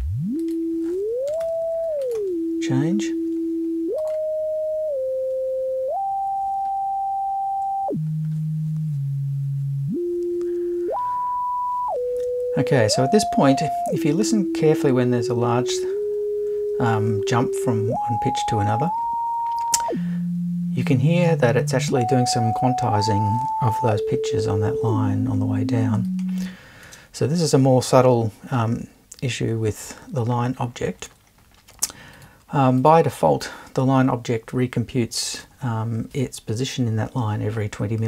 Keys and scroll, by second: 1.3 BackSpace, 1.4 1.